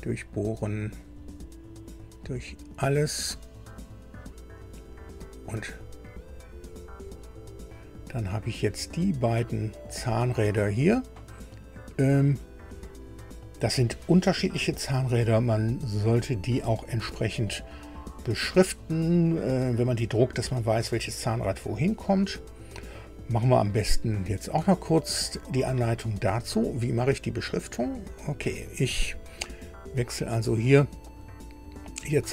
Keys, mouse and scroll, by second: 1.0 click, 3.3 click, 4.2 click, 5.5 click, 8.1-12.4 drag, 22.5 scroll down 1, 23.2 scroll up 1, 28.2 click, 31.1 scroll down 1, 32.2-32.3 scroll down 1.